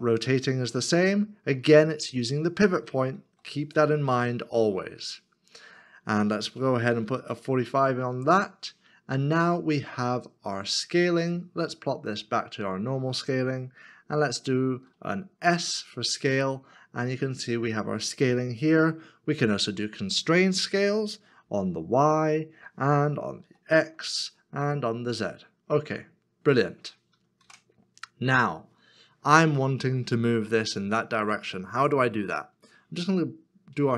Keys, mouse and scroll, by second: 3.2 z, 7.1 4, 7.2 5, 15.4 s, 21.4 y, 24.6 z, 27.4 ctrl+z.